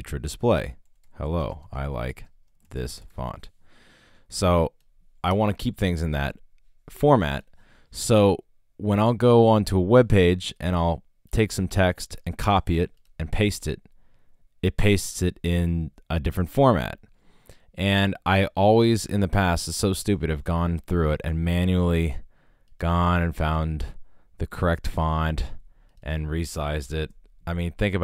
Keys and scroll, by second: 0.1 shift+Return, 0.6-3.6 typing, 5.3 BackSpace, 12.3 super+c, 13.4 super+v, 26.5-27.3 typing.